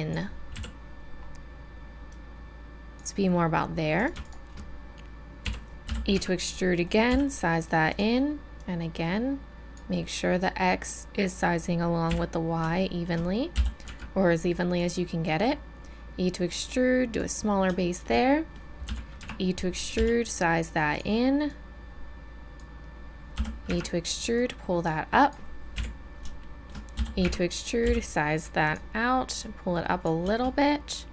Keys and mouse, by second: 0.5 KP_1, 2.1-4.0 drag, 5.4 KP_1, 5.9 e, 7.1 s, 12.1 KP_1, 12.8-16.7 drag, 13.6 e, 17.8 middle click, 18.8 e, 19.9 s, 21.5-22.5 drag, 23.3 e, 24.3-26.5 drag, 25.7 KP_1, 26.9 e, 27.8 s, 29.4 click.